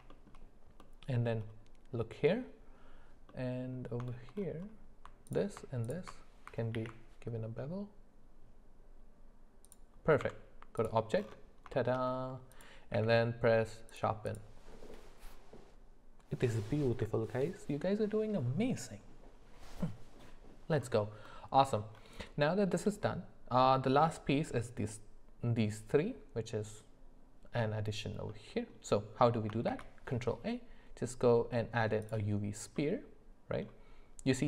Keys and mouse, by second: 0.1 shift+middle click, 3.3 middle click, 4.1 shift+middle click, 6.8 ctrl+b, 10.2 Tab, 11.8 shift+middle click, 12.5 click, 12.9 q, 21.3 middle click, 22.4 middle click, 28.3 middle click, 29.7 shift+a, 32.8 middle click.